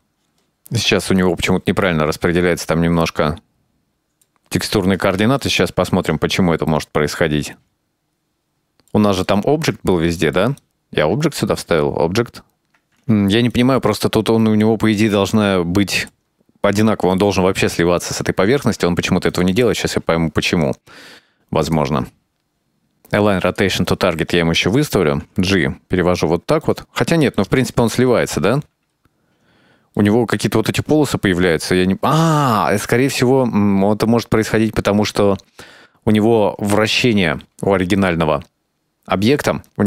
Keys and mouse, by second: 1.6-2.1 middle drag, 2.3 middle click, 4.9-6.3 middle drag, 6.4 click, 6.6 click, 6.9 middle click, 7.5 middle click, 7.7 click, 7.9 click, 8.1 Tab, 8.3 middle click, 9.0 click, 9.1 Tab, 9.4 middle click, 9.5-10.6 drag, 11.1 right click, 13.3-13.7 shift+middle drag, 14.1 middle click, 14.6 Tab, 14.8 middle click, 15.5-17.3 drag, 17.8 middle click, 18.1-20.3 middle drag, 21.0 right click, 21.2-21.5 middle drag, 21.9 shift+middle click, 22.2 click, 22.7-24.0 drag, 25.3 g, 27.4-28.7 shift+middle drag, 30.0-30.4 middle drag, 30.6-32.2 ctrl+middle drag, 32.7-37.1 middle drag.